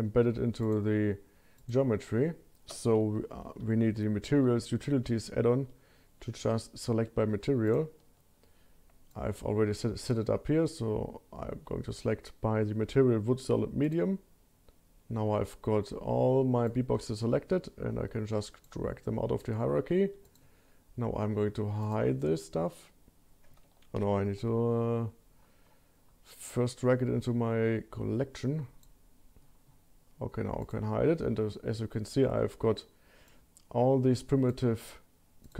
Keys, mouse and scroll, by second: 0.6 click, 1.6 click, 3.4 shift+q, 16.7 shift+click, 20.2 click, 21.9 click, 24.3 ctrl+z, 25.0-26.2 scroll down 5, 26.0 scroll up 1, 26.7 drag, 29.1-30.7 scroll up 5, 30.7 click, 30.7 scroll up 1, 31.3-32.5 scroll down 2, 33.3-34.5 drag, 34.6-35.4 scroll up 1, 35.4 click, 35.4 scroll up 1.